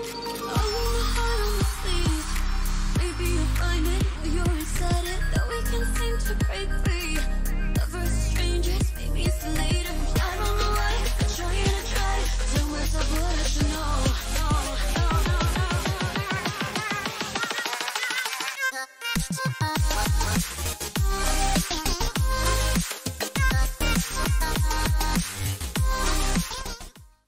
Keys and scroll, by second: 8.8 ctrl+alt+b, 13.0 ctrl+alt+u, 17.4 ctrl+alt+i.